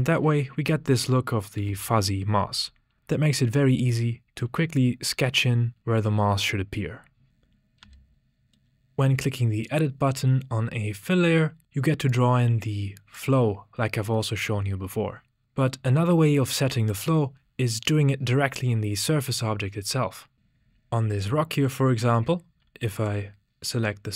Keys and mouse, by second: 1.6 n, 5.3 click, 6.2 click, 7.3 z, 7.8 n, 9.7 click, 10.0 typing, 12.1 click, 12.1 typing, 22.9 click.